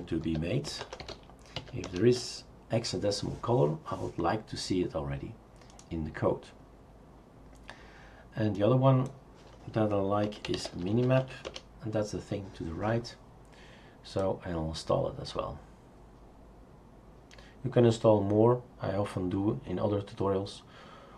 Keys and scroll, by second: 0.0-2.1 typing, 10.1-11.7 typing.